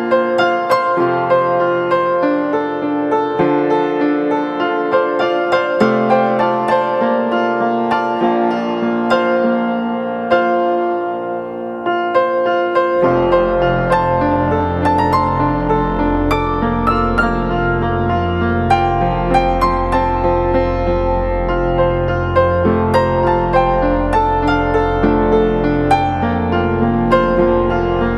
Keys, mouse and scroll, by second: 17.2 double click, 19.0-22.1 typing, 26.1-26.8 scroll down 1, 26.8 typing.